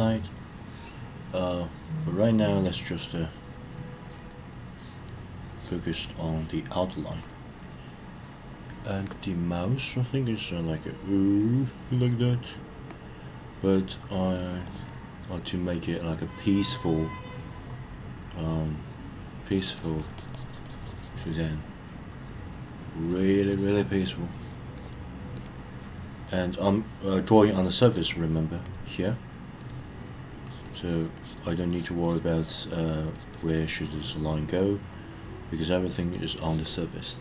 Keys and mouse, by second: 2.3-2.8 drag, 3.6 click, 4.1 click, 4.6-5.1 drag, 5.5-5.8 drag, 6.2 drag, 7.1 drag, 10.7-11.4 drag, 11.6-12.0 drag, 14.3 drag, 14.7 drag, 19.5 drag, 19.8 drag, 20.0 click, 20.2 drag, 20.3 drag, 20.5 click, 20.6 drag, 20.8 click, 21.0 click, 21.2 click, 23.0 drag, 23.5 drag, 23.9 drag, 24.3 drag, 24.8 drag, 25.3 drag, 27.5 click, 27.9 click, 28.6 click, 30.5 click, 30.8 click, 31.2 click, 31.7 click, 32.0 click, 32.4 click, 33.1 click, 33.3 click, 33.5 click, 33.6 click, 33.8 click, 33.9 click, 35.9 click, 36.7 click.